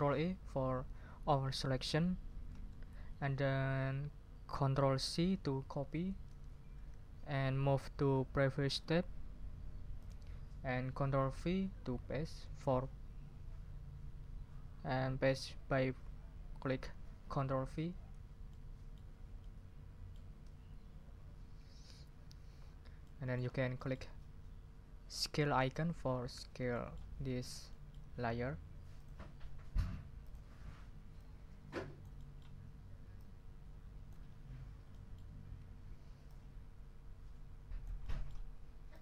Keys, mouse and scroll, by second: 2.5 ctrl+a, 6.2 ctrl+c, 10.0 scroll up 2, 18.5-20.3 ctrl+scroll up 6, 20.4 ctrl+v, 22.6 ctrl+scroll down 2, 23.0 ctrl+middle click, 23.5 ctrl+scroll down 2, 23.7 ctrl+middle click, 25.6 click, 26.7 ctrl+middle click, 29.0 click, 30.2 click, 31.2-32.6 drag, 33.2 ctrl+click, 34.2-34.9 ctrl+scroll up 4, 38.0 click, 38.9-39.0 drag.